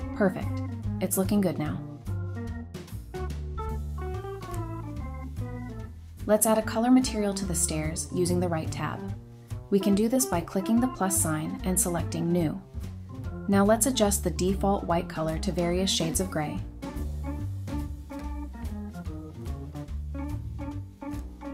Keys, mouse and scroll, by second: 0.1 typing, 0.2 Return, 1.4 scroll down 1, 5.5 scroll up 1, 5.8 Tab, 6.7 scroll down 1, 12.2 double click, 14.4-14.8 scroll down 1, 14.9-15.4 scroll up 1.